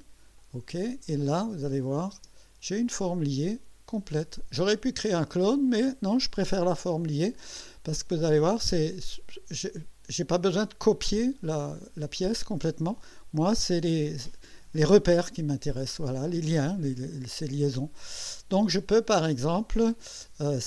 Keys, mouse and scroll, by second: 0.4 click, 1.8 click, 2.2 space, 2.9-5.0 drag, 8.7 scroll up 1, 15.4-16.7 drag, 16.8 right click.